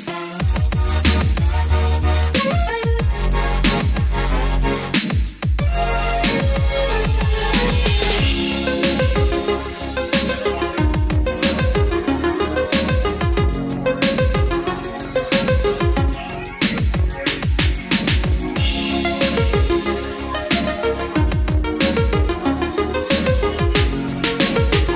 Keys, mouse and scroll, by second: 1.7-17.1 drag, 18.7-19.5 scroll down 1, 22.5-23.2 scroll up 1, 23.6-24.0 scroll down 1.